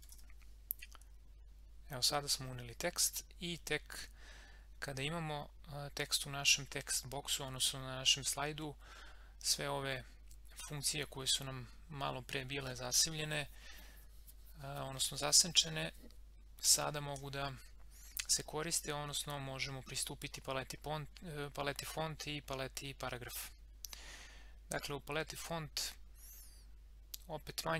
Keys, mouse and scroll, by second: 0.0-0.7 typing.